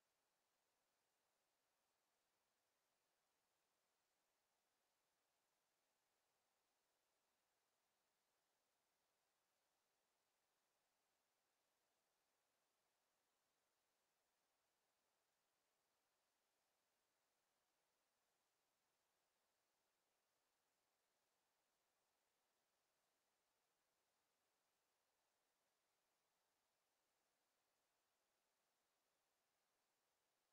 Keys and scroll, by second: 22.9 ctrl+z.